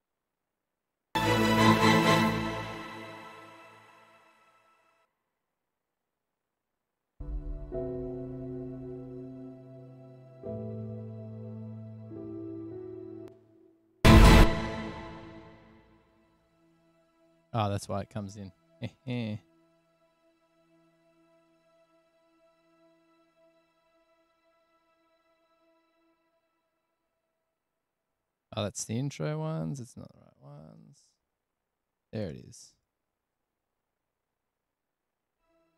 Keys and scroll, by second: 0.5 s, 1.0 space, 1.2 space, 5.3 s, 7.4 s, 12.2 super+=, 14.2 space, 15.5 super+=, 19.3 F8, 20.6 super+z, 29.7 super+z, 30.8 super+z, 32.4 F8, 34.1 F7, 34.8 space, 35.6 super+[.